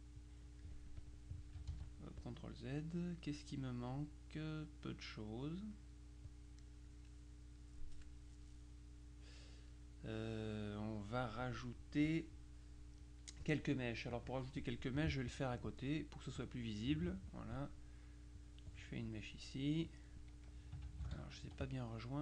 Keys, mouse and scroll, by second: 0.3 click, 1.8 ctrl+z, 2.3 ctrl+click, 5.4-7.1 middle drag, 7.6-10.3 middle drag, 10.6 middle click, 14.2 click, 16.5-17.7 drag, 18.5-19.6 drag, 21.1 ctrl+z, 21.5 ctrl+F2, 21.7 ctrl+click.